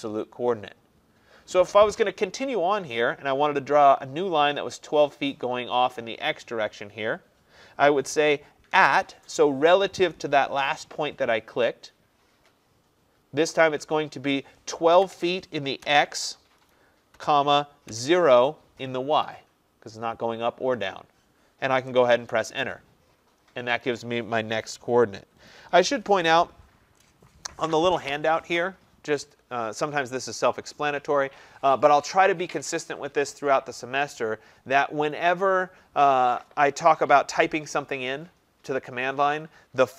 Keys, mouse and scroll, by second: 8.8 typing, 15.0-15.9 typing, 16.9-17.9 typing, 22.2 Return.